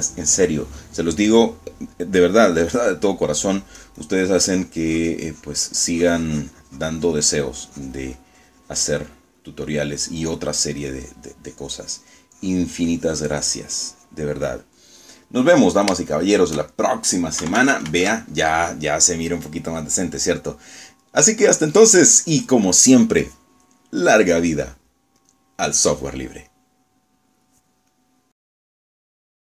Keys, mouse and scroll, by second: 0.3-1.4 middle drag, 3.6 middle click, 4.6-10.2 drag, 10.2 middle click, 10.8 middle click, 11.7-15.4 drag, 15.9 middle click, 16.8 click, 17.2 shift+middle click, 17.8 shift+middle click, 18.5 shift+KP_Subtract, 21.5-24.1 middle drag, 25.7 click, 26.3 click, 29.0 click.